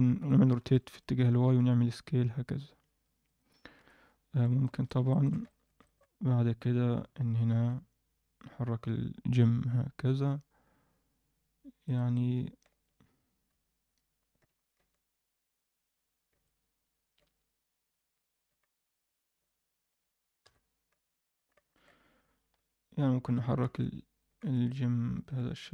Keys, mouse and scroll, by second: 0.2 r, 1.2-2.2 scroll up 2, 1.5 s, 3.7 KP_1, 4.2-4.6 scroll up 2, 4.6 shift+middle drag, 5.1 ctrl+alt+middle click, 5.4 shift+middle drag, 5.8 ctrl+middle click, 7.0 g, 12.1-12.8 alt+middle drag, 13.4 KP_1, 14.3 g, 16.2 scroll down 1, 16.4-17.0 alt+middle drag, 17.4-18.3 middle drag, 18.7 Tab, 19.4 middle click, 20.4 KP_1, 20.9 z, 21.4 a, 22.3 scroll up 1, 22.5 Tab, 23.2 g, 24.4 z, 24.6-25.2 alt+middle drag.